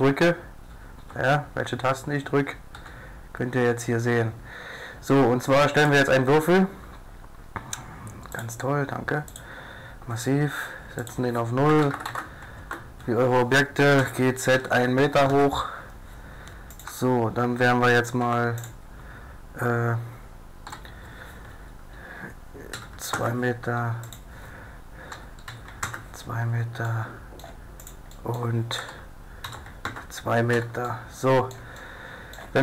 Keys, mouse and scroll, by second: 2.8 z, 2.8 t, 5.8 click, 14.0 g, 16.9 e, 17.3 right click, 18.3 Tab, 18.3 right click, 18.6-20.4 right drag, 20.7 e, 24.1-25.1 drag, 25.1 e, 27.8 click, 28.6-29.9 drag, 28.8 e, 30.5 a, 31.1-32.3 middle drag, 32.3 middle click.